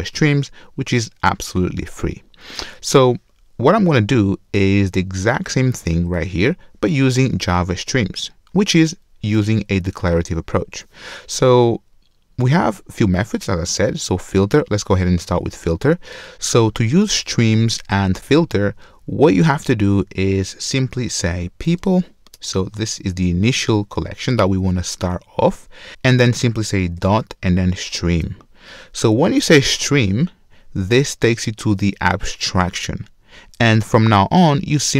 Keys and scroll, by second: 22.4 Return, 28.2 Return.